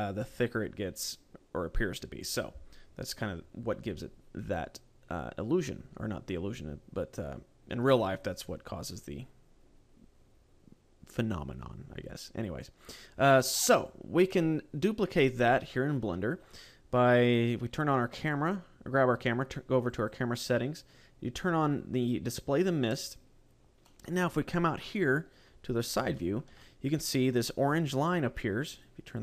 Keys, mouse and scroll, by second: 16.9 right click, 19.7 click, 22.3 click, 23.7 middle click, 25.3-25.9 scroll down 7, 25.9 shift+middle click, 26.4 middle click, 28.6 click, 28.9 click.